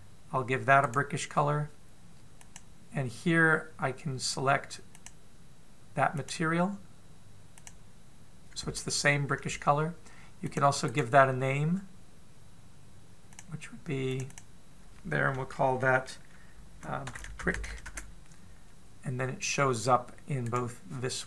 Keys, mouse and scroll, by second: 1.4 right click, 2.9 click, 5.5 click, 8.5 click, 11.1 click, 11.4 right click, 14.7 click, 14.9 click, 21.1 right click.